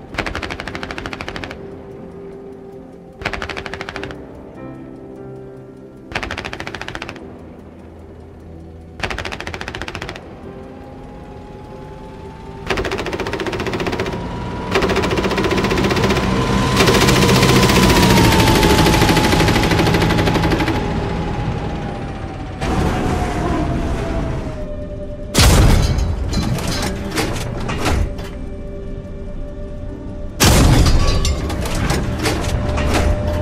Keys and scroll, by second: 0.0 a, 2.8 a, 7.1 a, 9.2 a, 10.8 a, 20.5 a, 21.2 w, 24.1 s, 31.2-32.1 typing.